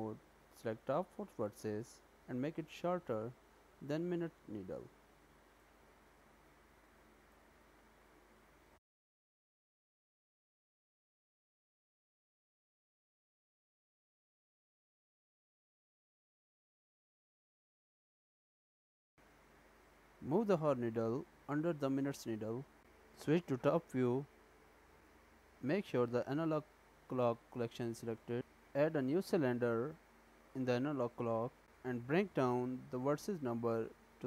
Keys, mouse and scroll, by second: 1.2 click, 1.7 g, 8.8 Tab, 12.8 middle click, 15.3-15.8 scroll up 3, 16.4 shift+middle click, 17.2 g, 19.3 click, 22.7 click, 23.3 click, 24.3-26.0 scroll down 4, 26.0 click, 27.1 click, 28.6 shift+a, 32.7 click, 33.9 click.